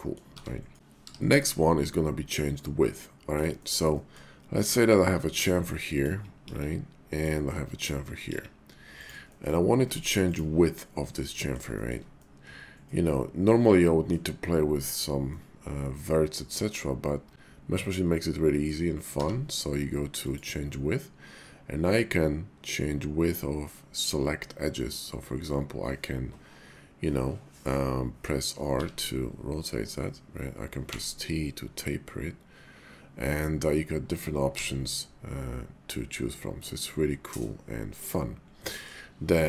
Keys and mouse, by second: 0.3 r, 1.0 y, 3.0 click, 3.5 shift+click, 3.7 shift+middle click, 3.9 middle click, 4.6 click, 5.3 Tab, 6.0 click, 6.4 ctrl+b, 7.1 click, 7.7 click, 8.3 ctrl+b, 9.0 click, 9.2 middle click, 9.8 Tab, 10.2 click, 11.3 middle click, 11.8 shift+middle click, 12.2-14.1 middle drag, 15.2-18.7 middle drag, 19.1 y, 28.8 r, 30.9 t, 34.5 r, 38.0 click, 38.6 middle click.